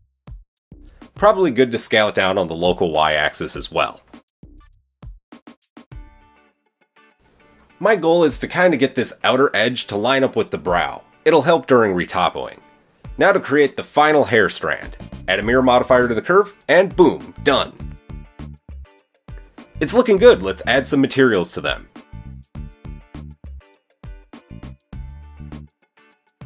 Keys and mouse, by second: 1.8 s, 4.7-12.9 shift+middle drag, 12.9-15.2 drag, 15.2 middle click, 17.0 click, 18.0-18.4 middle drag, 18.4 click, 18.4-20.3 middle drag, 20.3 click, 20.5-21.1 middle drag, 21.1-26.4 drag, 22.5 middle click, 22.5 right click, 24.6 middle click, 24.6 right click.